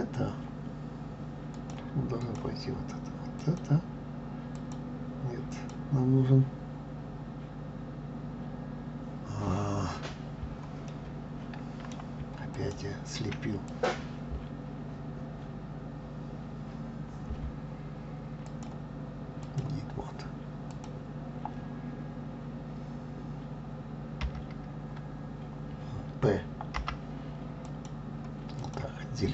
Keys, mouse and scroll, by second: 1.5-3.6 drag, 4.5 click, 5.5 click, 10.9-12.5 middle drag, 12.5 shift+click, 13.7 click, 18.4-20.8 drag, 28.6 click.